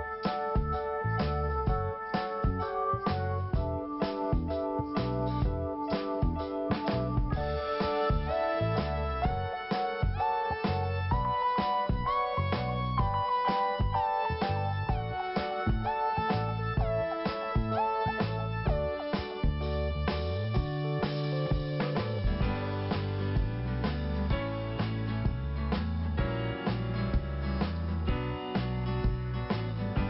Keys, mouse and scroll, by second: 5.5 click, 6.4 click, 12.0 scroll down 2, 13.1 click, 20.2 click, 21.9 click, 26.6 click, 26.7 click, 28.1 click, 28.1 click, 28.6 click.